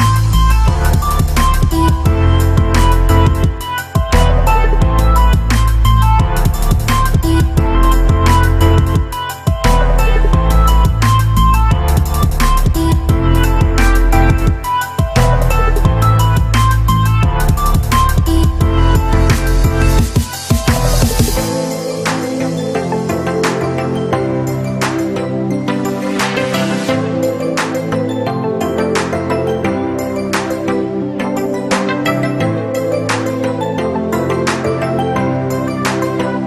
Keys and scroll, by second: 18.4 ctrl+a, 18.9 ctrl+v, 21.8 ctrl+a.